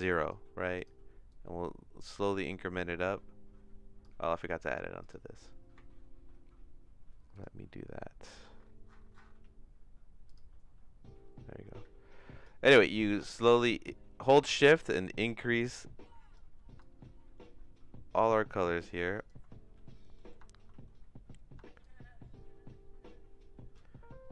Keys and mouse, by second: 0.0 click, 1.3-4.0 drag, 7.3 click, 12.4-16.3 drag, 16.8-19.3 shift+drag, 20.1 middle click, 21.8-23.7 shift+drag.